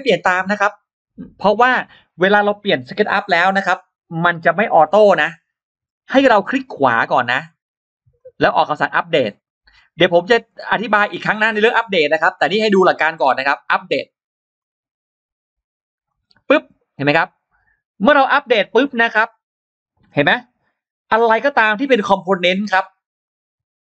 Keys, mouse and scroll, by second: 6.9-8.0 right drag, 8.0 click, 8.4 scroll down 2, 8.8 right click, 14.4 click, 16.3-17.0 scroll up 4, 20.9-21.3 scroll down 2, 22.0 click, 22.4-22.7 scroll up 2, 23.1 click.